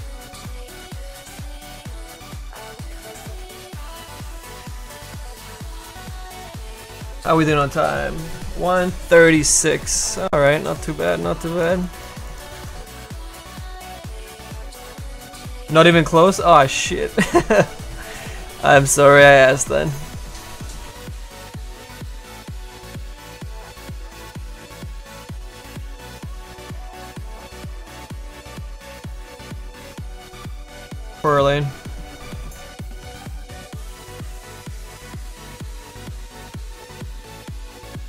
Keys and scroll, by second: 22.8 s, 23.2 s, 23.7 s, 25.3 s.